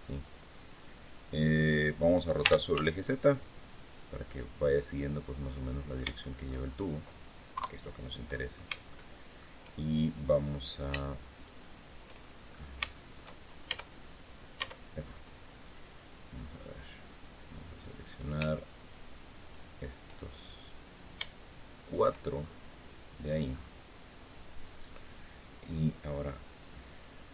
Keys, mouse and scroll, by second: 2.2 r, 2.5 z, 4.5 click, 4.9-5.2 scroll down 2, 5.2-6.4 middle drag, 7.3 KP_3, 8.0-8.5 scroll up 3, 8.6 shift+middle click, 10.2 right click, 11.1 shift+right click, 12.2-13.1 shift+scroll up 2, 12.7 shift+middle click, 13.4 shift+Tab, 14.3 Tab, 14.8-15.2 scroll up 1, 16.2 click, 17.8 right click, 18.6 shift+right click, 19.1 shift+right click, 20.5 click, 21.5 shift+right click, 22.1-23.1 shift+scroll down 2, 23.2 scroll up 1, 27.0 scroll down 2.